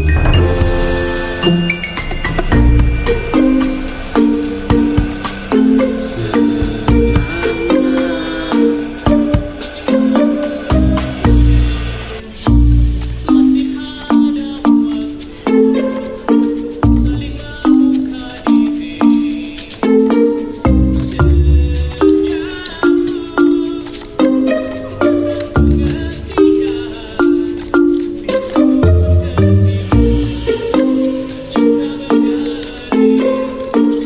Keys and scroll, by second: 9.5 2, 16.3 1, 26.4 ctrl+z, 30.7 ctrl+c, 31.6 Escape, 33.4 ctrl+f.